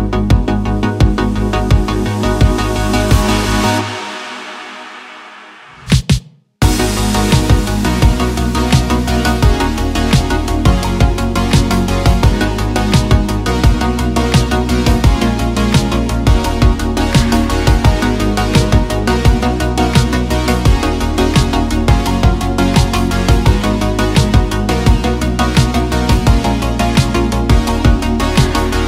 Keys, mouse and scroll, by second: 0.0 a, 0.4 u, 1.9 s, 2.6 a, 2.8 s, 3.8 click, 4.3 g, 5.4 click, 5.7 s, 7.2 click, 8.4 click, 9.6 middle click, 11.5 click, 12.4 middle click, 13.2 middle click, 13.8 middle click, 15.7 middle click, 17.5 middle click, 18.2 click, 18.7 middle click, 21.6 click, 21.9 click, 22.9 middle click, 23.6 middle click, 24.4 middle click, 24.9 click, 25.8 Tab, 26.8-28.8 drag.